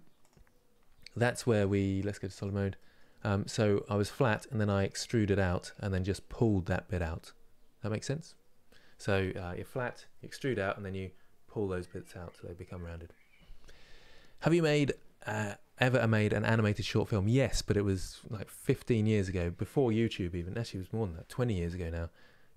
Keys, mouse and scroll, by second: 0.7-2.0 middle drag, 2.0 click, 2.4 middle click, 2.8 scroll up 2.